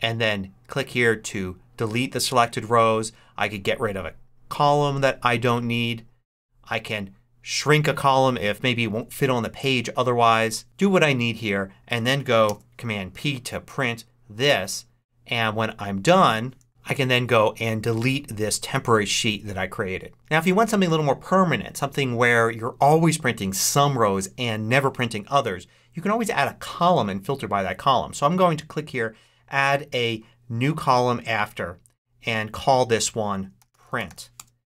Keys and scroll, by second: 12.3 super+p, 33.2-34.2 typing.